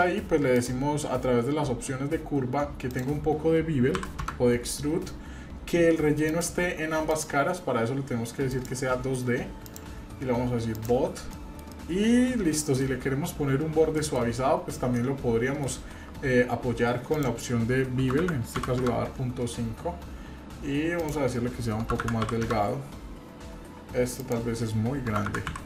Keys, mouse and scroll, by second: 0.5 click, 2.9-4.9 drag, 6.3 click, 8.5 click, 9.7-10.8 drag, 11.3 middle click, 11.7-12.8 middle drag, 13.9 shift+middle click, 14.4-14.7 scroll up 1, 15.0 shift+middle click, 16.2-17.2 scroll down 2, 17.2-19.2 drag, 17.2-18.0 scroll down 1, 21.0-22.9 drag.